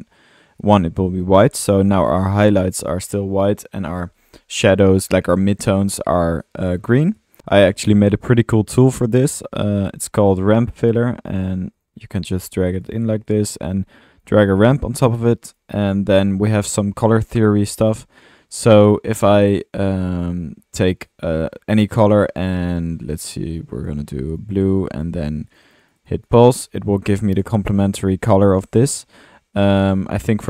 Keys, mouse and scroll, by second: 1.2 click, 1.9 click, 2.8-5.5 middle drag, 5.9 middle click, 7.1 middle click, 7.1 drag, 11.8 drag, 12.3 click, 12.7 click, 21.3 click, 23.5-24.0 drag, 28.7 ctrl+z.